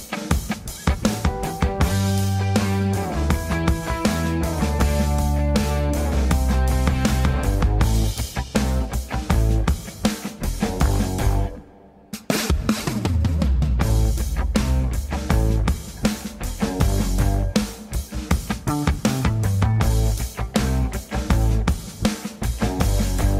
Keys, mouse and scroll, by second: 0.4 shift+click, 0.6 shift+click, 0.9 g, 1.6 ctrl+j, 1.9 click, 2.1 click, 2.6 ctrl+j, 2.9 g, 4.0 scroll down 3, 4.3 shift+middle click, 4.5 click, 4.7 g, 5.0 click, 5.2 g, 5.9 click, 6.1 click, 6.3 click, 6.8 click, 7.1 click, 7.4 shift+middle click, 8.0 click, 8.9 click, 9.1 click, 9.5 click, 10.4 click, 13.7 click, 14.4 ctrl+s, 14.6 click, 15.1 click, 16.5 click, 16.7-17.2 scroll down 3, 17.2 ctrl+s, 17.3 scroll up 4, 17.6 shift+middle click, 17.6-18.2 scroll down 2, 18.3 shift+middle click, 18.7 click, 18.9 ctrl+c, 19.0 ctrl+c, 22.2-22.9 scroll down 2, 22.5 Tab.